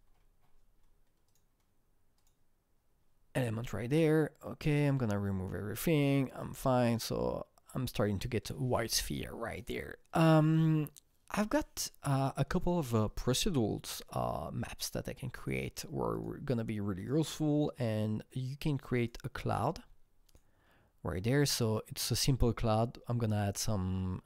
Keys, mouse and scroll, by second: 0.1-0.7 scroll down 6, 1.3 click, 2.3 click, 4.9 click, 5.3-5.9 scroll up 6, 6.6 click, 7.9 click, 13.5 click, 13.5-14.2 scroll down 6, 15.4 click, 16.2 click, 17.0 click, 19.0 click, 20.3-24.2 click.